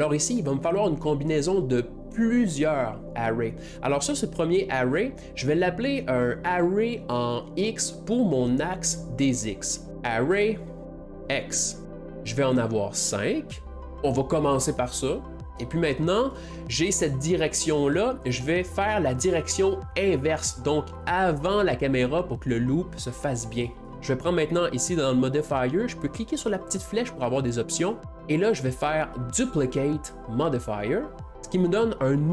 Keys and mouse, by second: 1.4 middle click, 5.6 middle click, 6.0 middle click, 6.4 middle click, 6.6 middle click, 8.0-11.8 middle drag, 10.0-11.4 drag, 11.6-16.1 drag, 16.0-18.4 middle drag, 22.2-23.9 middle drag, 28.2-30.8 drag, 29.6-31.3 middle drag.